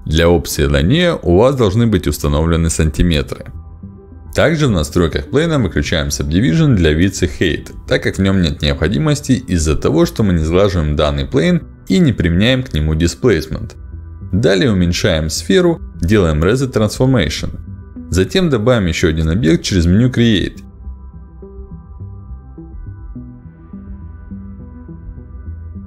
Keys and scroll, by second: 2.0 ctrl+alt+d, 9.5 1, 9.6 Return, 11.4 1, 11.7 Return, 13.8 r, 20.6 space, 23.0 r, 23.3 w.